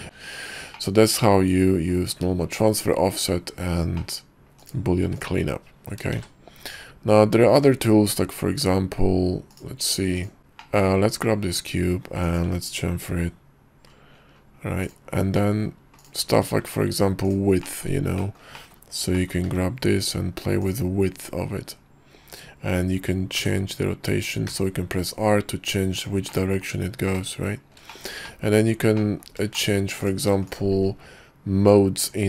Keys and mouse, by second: 0.8-2.0 drag, 4.1 click, 5.1 x, 6.2 shift+a, 9.7-10.4 drag, 11.6 Tab, 12.3 click, 13.2 ctrl+b, 15.6 click, 16.1 click, 16.7 Tab, 17.4 click, 17.7 click, 18.3 shift+click, 18.7 click, 19.3 click, 19.6 y, 26.5 middle click, 27.2 middle click, 28.5 middle click, 29.2 click, 29.7 shift+click, 30.1 click, 30.6 shift+click.